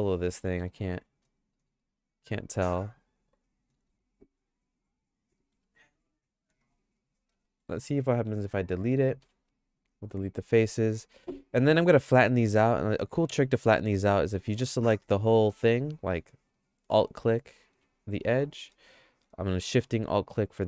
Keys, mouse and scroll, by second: 0.7 KP_Divide, 1.5 middle click, 1.8-3.8 shift+middle drag, 3.9 Tab, 4.7 click, 5.5 3, 9.2 x, 11.7 1, 13.2 2, 14.2 middle click, 14.4 shift+middle click, 18.6 middle click, 18.8 shift+middle click, 20.0 middle click.